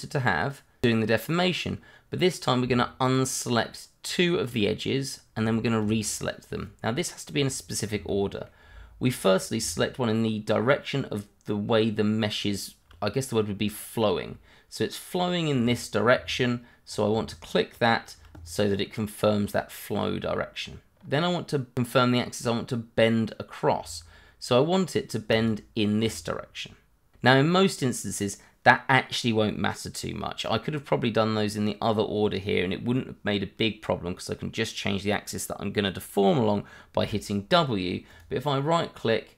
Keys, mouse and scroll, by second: 3.0 shift+click, 3.2 click, 4.0 shift+click, 4.6 click, 5.0-5.3 scroll up 1, 5.4 shift+middle click, 8.1 middle click, 8.8-9.3 scroll down 1, 9.3 scroll up 1, 13.2-16.3 scroll down 1, 16.8 scroll up 1, 17.7 click, 18.4-19.3 scroll down 1, 20.9-22.2 scroll up 1, 25.3 shift+click, 25.4 click, 26.3-27.1 scroll down 1, 30.7-31.2 scroll up 1, 38.1 right click.